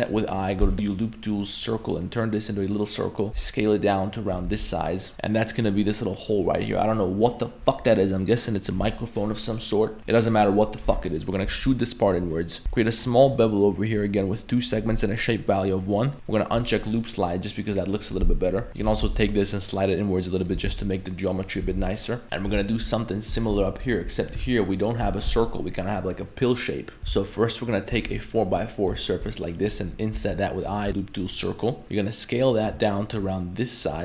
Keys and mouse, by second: 0.6 w, 3.3 s, 4.5 Tab, 4.9 middle click, 6.1 middle click, 10.0 ctrl+z, 10.0 2, 11.1 middle click, 11.5 e, 12.6 ctrl+b, 15.4 click, 16.8 click, 18.7 alt+shift+2, 18.7 right click, 19.0 g, 20.5 g, 21.6 Tab, 21.9-22.2 middle drag, 22.2 alt+1, 22.2 right click, 22.7 right click, 23.4 middle click, 23.8 3, 24.1 right click, 24.8 ctrl+shift+click, 27.7 ctrl+shift+right click, 29.1 shift+middle click, 30.2 i, 30.9 w, 31.8 s.